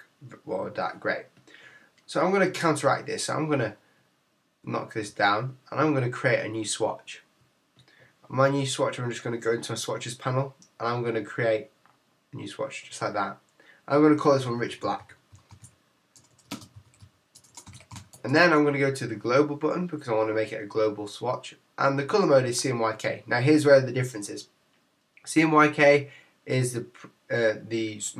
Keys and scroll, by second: 14.4 shift+r, 16.7 shift+b, 18.1 Tab.